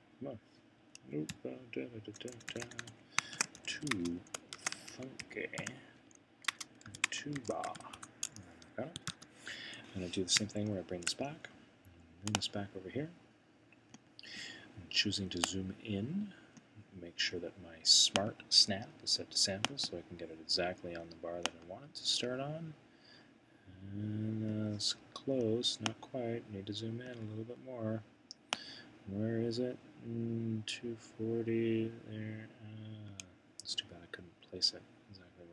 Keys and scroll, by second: 0.9 Right, 3.1-9.6 typing, 10.7 typing.